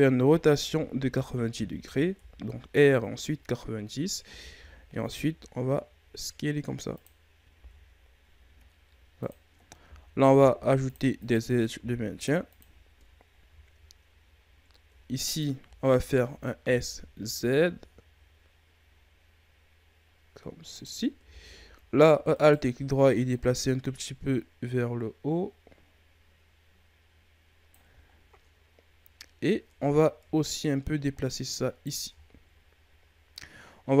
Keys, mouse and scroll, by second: 0.2 r, 2.1 KP_1, 3.4-4.2 ctrl+scroll up 4, 4.2 s, 7.5 g, 10.3 ctrl+r, 11.7 ctrl+r, 13.0-14.8 ctrl+scroll up 6, 15.2 alt+right click, 16.5 s, 22.3 alt+right click, 23.2-26.3 drag, 28.1-29.4 ctrl+scroll down 2, 29.4 scroll up 1, 29.6 Tab, 30.2 Tab, 30.6 right click, 31.9 Tab, 32.1-34.0 scroll down 5.